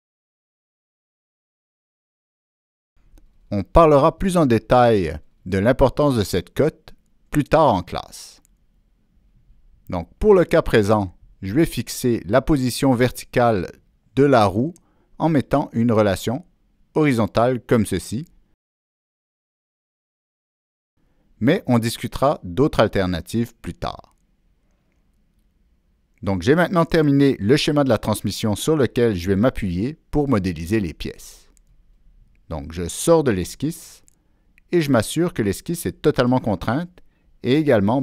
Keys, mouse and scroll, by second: 2.1 Down, 2.1 Return, 2.1 click, 2.3 Down, 2.3 Return, 4.3 click, 4.7 Escape, 4.7 click, 12.1-13.0 drag, 13.6 click, 16.7 click, 19.0 click, 33.4 click, 35.9 click, 37.8 click.